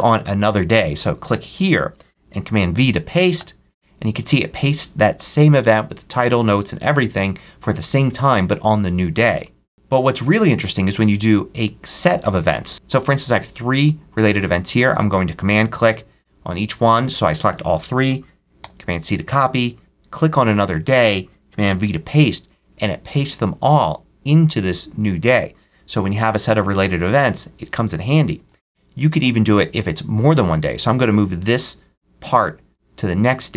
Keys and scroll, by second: 3.2 super+v, 9.6 super+z, 18.4 super+c, 21.5 super+v, 28.3 super+z.